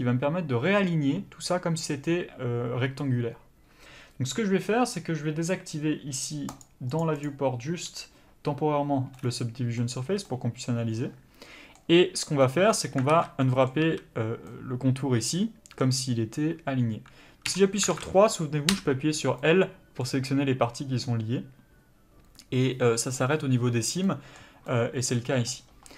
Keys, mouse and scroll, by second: 6.5 click, 9.1 middle click, 10.0 a, 10.3 middle click, 13.1 alt+a, 13.4 middle click, 13.8 a, 14.4 middle click, 17.4 3, 17.9 alt+a, 18.7 l, 19.4 middle click.